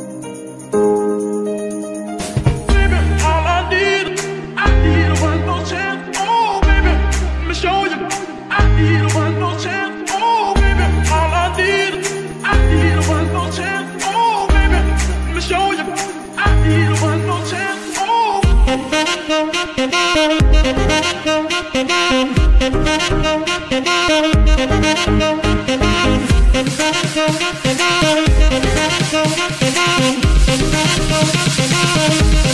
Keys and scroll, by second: 5.4 KP_1, 6.7 shift+d, 7.0 shift+z, 8.3 y, 12.4 shift+g, 15.3 g, 17.9 shift+g, 23.9 shift+n, 28.9 F2, 29.7 BackSpace, 30.9 BackSpace, 32.1-32.4 typing.